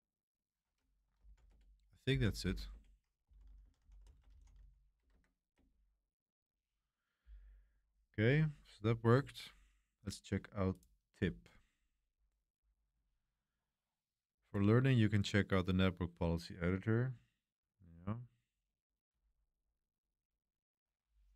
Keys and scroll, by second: 0.9-5.5 typing.